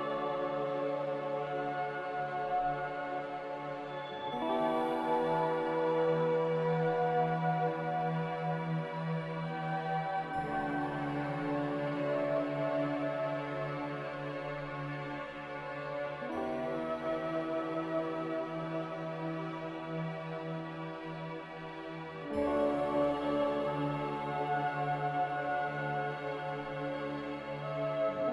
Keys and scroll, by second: 3.7 typing, 4.2 Return, 17.2 ctrl+b, 21.5 ctrl+b.